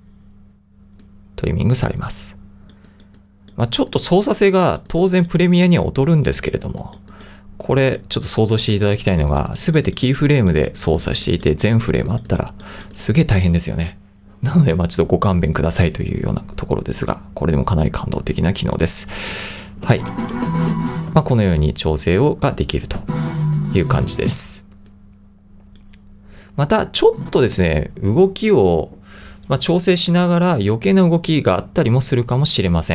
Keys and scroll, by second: 19.9 space, 21.1 space, 23.0 space, 24.3 space.